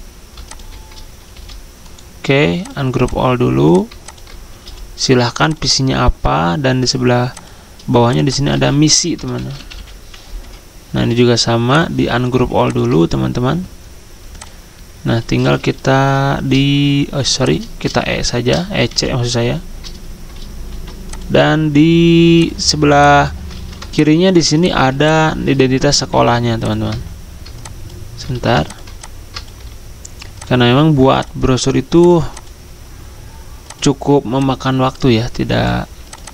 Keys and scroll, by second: 0.5-1.0 typing, 4.6 c, 8.5 ctrl+a, 9.4-10.3 typing, 10.4 Escape, 15.9 ctrl+e, 17.8 e, 18.9 c, 20.7 ctrl+g, 23.5 ctrl+z, 25.9 ctrl+g, 28.4 ctrl+z.